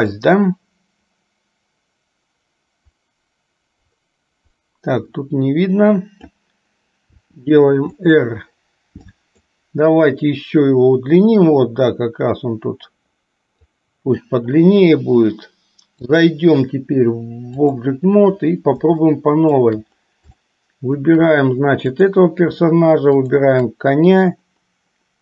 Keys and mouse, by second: 0.3-6.6 drag, 7.3 r, 9.3 click, 11.6-13.9 drag, 16.3-18.2 drag, 19.2-19.9 shift+middle drag, 20.7-21.3 shift+middle drag, 23.3 shift+click.